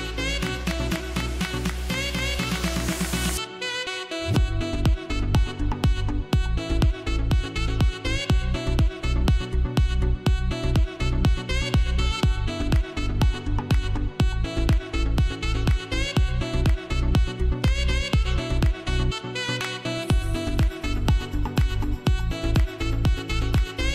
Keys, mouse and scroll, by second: 0.0-3.9 typing, 0.0 click, 0.8 click, 1.6 click, 2.1 click, 3.0 click, 3.5 click, 4.2 click, 4.6-5.0 scroll down 1, 5.4-8.6 typing, 5.4 click, 6.3 click, 7.2 click, 7.6 click, 8.6 click, 9.0-9.4 scroll down 1, 12.8 space, 13.0 click, 13.3 space, 13.7-14.1 scroll up 1, 14.1 space, 14.2 click, 18.8 ctrl+j, 19.8 ctrl+shift+a.